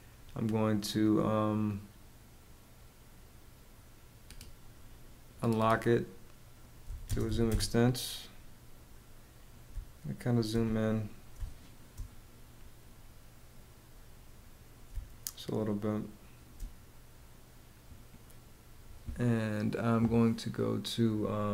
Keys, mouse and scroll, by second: 6.4 z, 6.6 space, 6.8 e, 7.0 space, 9.2 space, 10.9 space, 14.4 space.